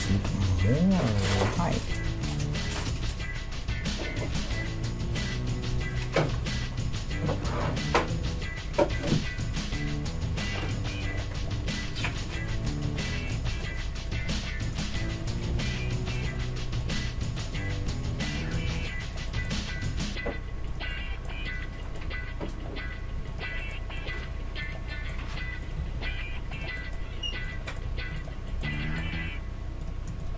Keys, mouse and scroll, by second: 0.7 Tab, 1.0 click, 1.4 Tab, 1.9-4.2 right drag, 2.1 Tab, 2.9 g, 6.3-8.1 right drag, 6.5 g, 8.7-11.3 right drag, 9.9 g, 11.6-12.6 middle drag, 12.6-16.1 right drag, 15.5 g, 16.1 middle click, 16.9 middle click, 18.5 g, 19.9 g, 21.4 middle click, 22.1 g, 23.2-26.9 middle drag, 24.0-27.4 right drag, 24.2 g, 25.8 g, 27.2-29.8 middle drag, 27.4-29.1 right drag, 27.9 g, 29.8-30.3 right drag.